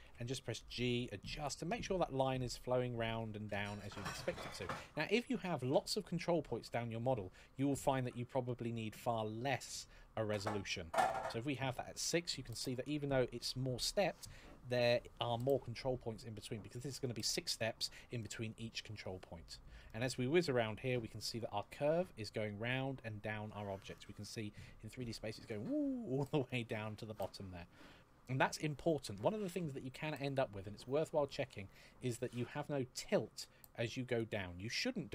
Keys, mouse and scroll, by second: 1.1 click, 2.4-2.8 scroll down 1, 2.9 shift+middle click, 4.3 scroll down 1, 7.3 click, 10.8 click, 11.8-12.2 scroll up 1, 12.3 shift+middle click, 18.0 shift+middle click, 18.8 scroll down 2, 19.6 middle click, 21.6-22.4 scroll up 1, 22.4 middle click, 26.2 middle click, 30.1 click, 33.8 click.